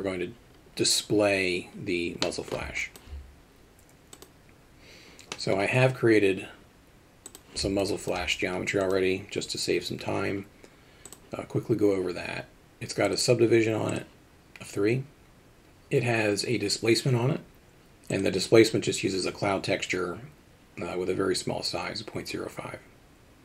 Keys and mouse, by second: 2.3 middle click, 2.8 alt+shift+middle drag, 5.4 middle drag, 7.3 click, 7.8-8.1 alt+shift+middle drag, 8.9 click, 13.1 click, 14.0 drag, 18.2 click.